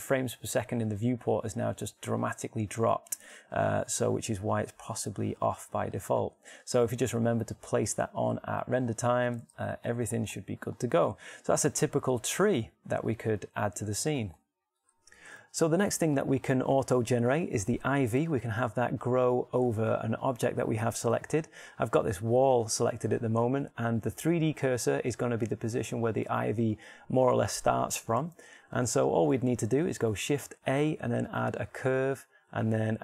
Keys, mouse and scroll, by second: 5.0 alt+a, 6.3-9.2 drag, 8.8 alt+a, 10.8 alt+a, 11.9-15.4 middle drag, 31.4 shift+a.